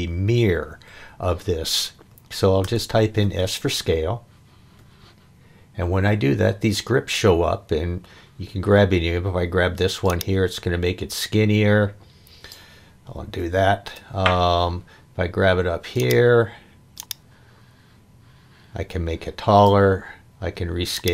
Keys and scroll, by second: 2.6 s, 13.4 super+z.